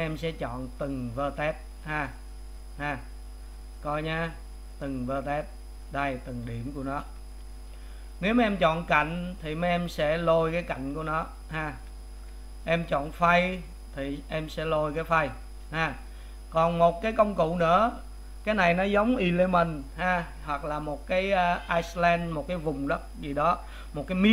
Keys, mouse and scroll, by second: 1.0 click, 1.9 click, 4.3-5.6 drag, 7.2 ctrl+z, 10.5 click, 11.7 click, 12.2 ctrl+z, 14.0 click, 14.7 click, 15.9 ctrl+z.